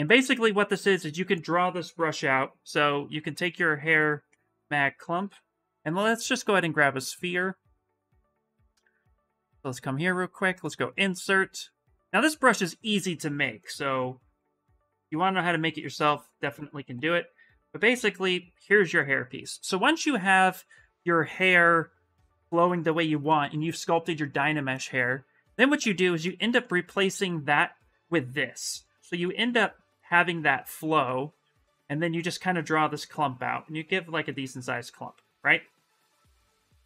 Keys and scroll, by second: 0.6 s, 1.7 b, 5.1 s, 15.7 s, 32.6 s.